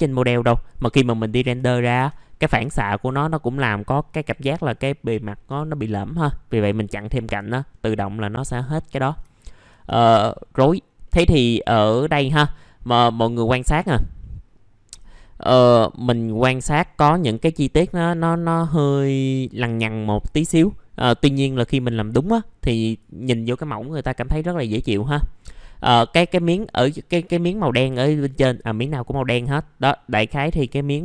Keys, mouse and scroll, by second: 1.1 right click, 2.2-2.6 scroll down 1, 2.6 F4, 3.0-6.2 scroll down 1, 6.2-7.4 scroll up 1, 7.4 scroll down 1, 8.6 alt+middle click, 9.0 scroll down 1, 9.3 alt+middle click, 10.3-10.7 scroll down 1, 11.0 middle click, 12.5-13.2 scroll up 1, 13.2 middle click, 18.3-23.2 drag, 24.8-31.0 drag.